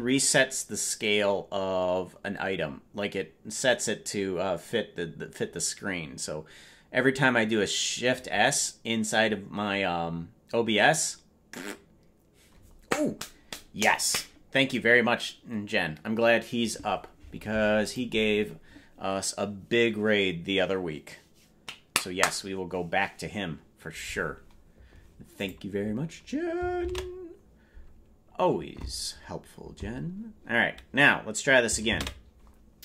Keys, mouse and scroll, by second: 32.0 ctrl+space.